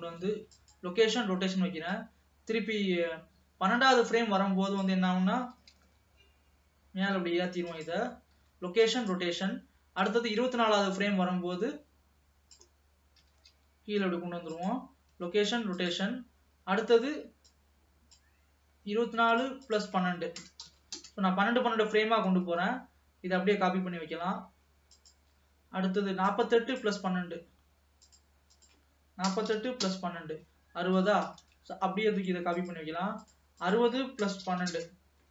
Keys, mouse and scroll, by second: 1.7 ctrl+s, 2.1-5.1 drag, 5.5 g, 8.4 |, 10.2-13.1 drag, 13.3 g, 17.6-22.4 drag, 22.7 shift+d, 26.4-31.2 drag, 31.5 shift+d, 33.2-35.3 drag.